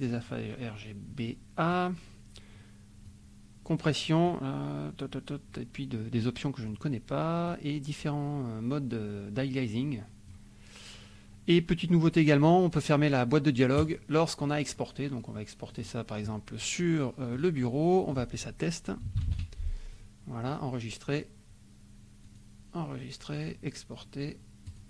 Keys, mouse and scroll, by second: 3.1-4.4 drag, 7.4-10.5 drag, 13.8 click, 15.7 click, 17.3 click, 18.1 click, 18.8-19.8 typing, 20.5 click, 22.2 click, 24.7 click.